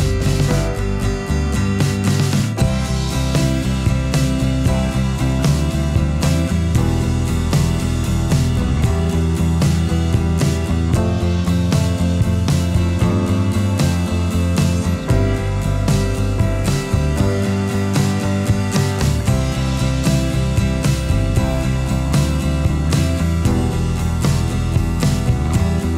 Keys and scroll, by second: 13.5 space.